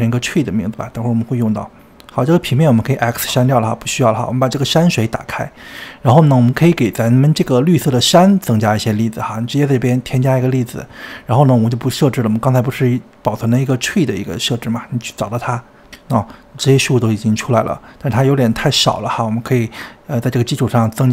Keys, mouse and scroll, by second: 0.4 e, 1.8 click, 2.7 x, 3.0 click, 4.2 click, 4.8-6.6 scroll down 24, 6.6-7.7 middle drag, 7.7 click, 8.0-8.7 scroll up 4, 10.5-16.4 drag, 16.4-18.6 shift+middle drag, 18.6-19.4 scroll up 2, 19.4-20.6 scroll down 1, 20.6-21.1 scroll down 1.